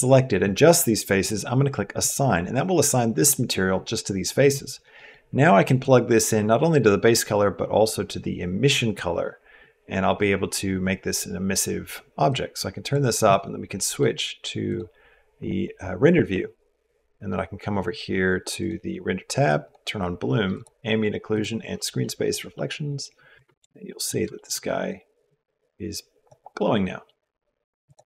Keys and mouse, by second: 4.8 middle click, 5.6-8.8 drag, 12.1 click, 13.6 middle click, 14.5 click, 20.3 click, 21.1 click, 21.8 middle click, 22.3 middle click, 23.1 Tab, 23.7 click, 24.1 shift+click, 25.3 click, 25.4 middle click, 25.5 click, 25.6 middle click, 26.4 middle click, 27.6 click.